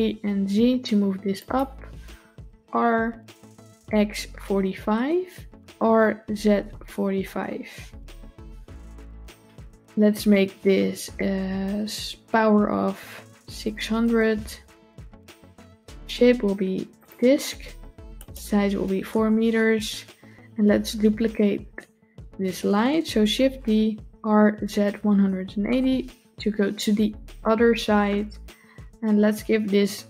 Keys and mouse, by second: 2.3 r, 10.0-13.9 drag, 13.7 KP_0, 15.8-16.9 drag, 18.1 click, 23.3 shift+d.